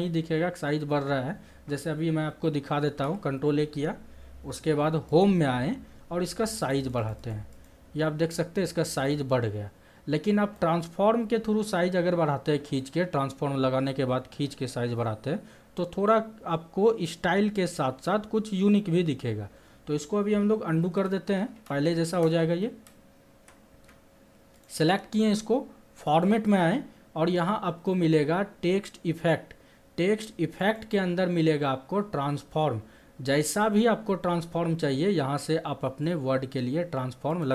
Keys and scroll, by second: 2.7 ctrl+a, 20.7 ctrl+z.